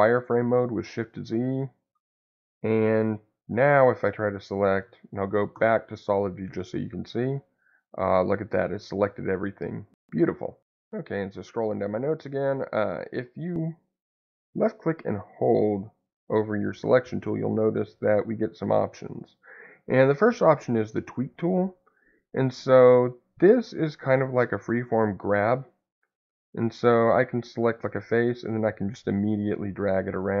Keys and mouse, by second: 1.3 click, 3.2 click, 5.5 shift+z, 6.6-9.8 middle drag, 14.1-21.7 drag, 26.4 click, 28.1-30.4 drag.